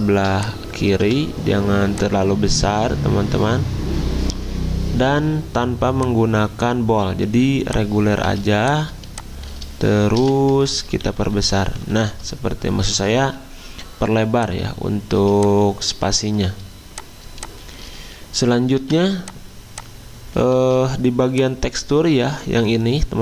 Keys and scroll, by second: 0.2-1.0 typing, 8.3 z, 10.1 v, 10.9 alt+Right, 11.1 alt+Right, 11.3 alt+Right, 11.4 alt+Right, 12.9 alt+Left, 15.2 z, 17.2 v.